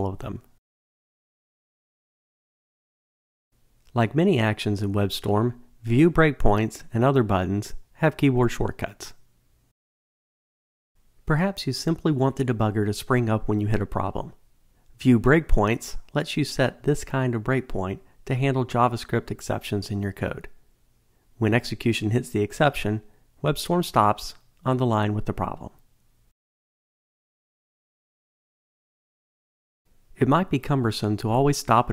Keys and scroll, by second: 11.6 ctrl+shift+super+F8, 23.3 super+r.